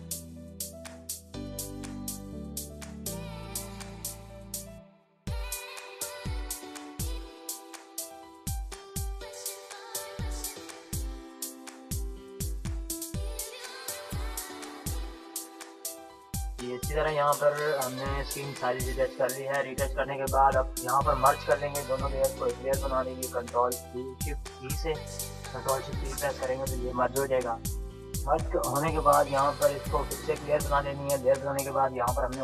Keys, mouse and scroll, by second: 3.2 [, 3.6 [, 3.7-8.2 drag, 8.2 ], 8.6-15.4 drag, 15.4 ctrl+-, 17.4 click, 19.6 ctrl+-, 19.9 ctrl+=, 23.3 ctrl+shift+e, 29.0-32.4 drag.